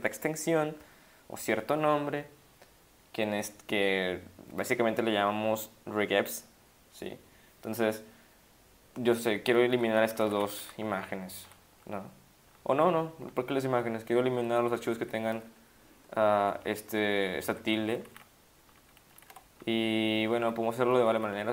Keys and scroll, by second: 9.7 Up, 9.9 Down, 10.1 Down, 10.2 Up, 10.3 Down, 10.4 Up, 10.6 Up, 11.2 Down, 11.7 Up, 12.6 Down, 13.1 Down, 13.8 Down, 14.3 Down, 14.4 Down, 14.6 Down, 14.8 ctrl+Right, 15.0 ctrl+Right, 16.6 shift+Right, 16.8 shift+Left, 17.0 shift+Right, 17.4 shift+Left, 17.7 shift+Left, 18.0 shift+Right, 18.0 typing, 18.1 shift+Right, 18.7 shift+Left, 19.1 shift+Right, 19.6 Left, 20.2 ctrl+Left, 20.4 ctrl+Left, 21.0 ctrl+shift+Right, 21.1 ctrl+shift+Right, 21.3 ctrl+shift+Right.